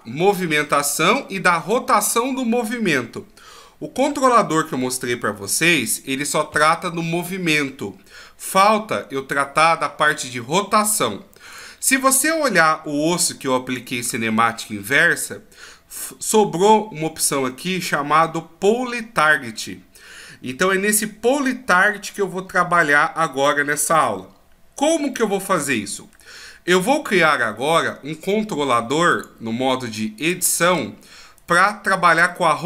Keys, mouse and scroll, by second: 4.1 alt+g, 4.7 alt+s, 5.4 alt+r, 11.5 right click, 25.1 middle click, 30.3 click, 31.4 right click, 32.4 middle click.